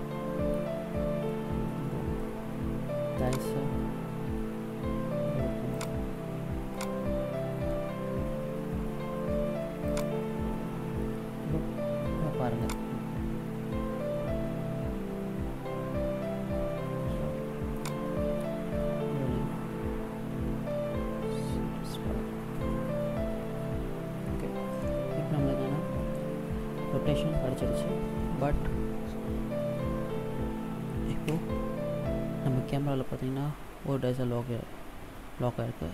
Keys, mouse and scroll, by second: 1.1 middle click, 3.2 right click, 4.1 r, 6.7 right click, 7.5 r, 12.4 click, 17.5 click, 31.1 KP_0.